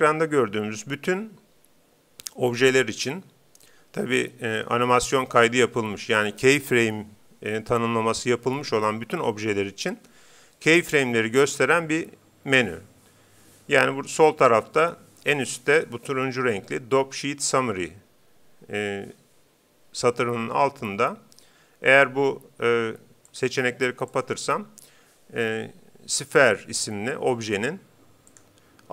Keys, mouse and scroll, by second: 23.3-25.7 drag, 28.3-28.9 drag.